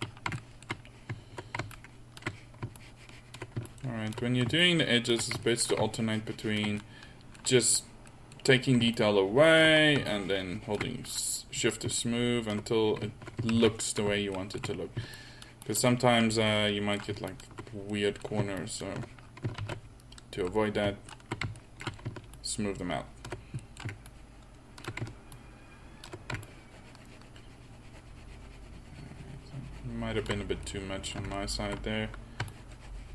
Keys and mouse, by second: 0.6 middle click, 1.8-8.1 middle drag, 9.0-14.1 middle drag, 14.1 ctrl+z, 15.2-16.6 middle drag, 16.8-19.2 middle drag, 20.2 ctrl+z, 30.7-31.9 middle drag.